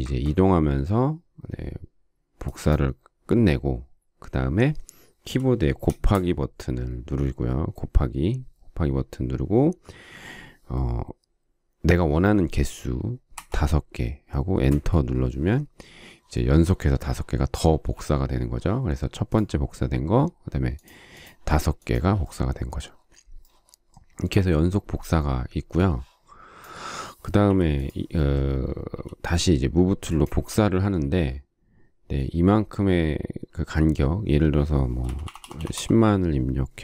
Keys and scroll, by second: 5.8 shift+8, 13.3 5, 14.7 Return, 17.6 space, 27.5 Delete, 34.8-36.2 typing.